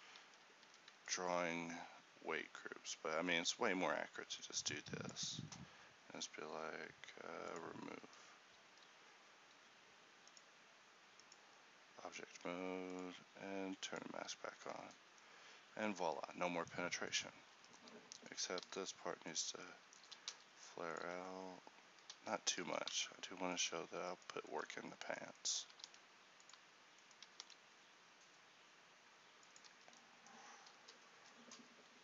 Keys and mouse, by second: 0.4 a, 1.2 ctrl+e, 8.2 Tab, 8.8 z, 14.6 a, 17.6 Tab, 18.7 s, 20.2 g, 21.1 s, 22.7 g, 27.5 s, 29.8 Tab, 31.3 Tab.